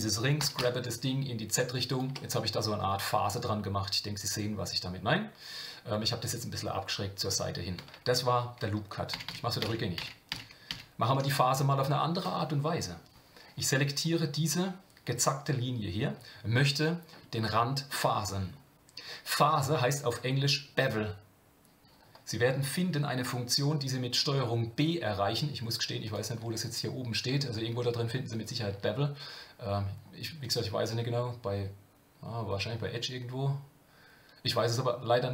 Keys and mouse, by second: 0.4 g, 2.1 Tab, 2.8-5.9 middle drag, 9.1-11.2 ctrl+z, 17.4 shift+middle click, 26.0-29.2 drag, 30.4-35.3 drag.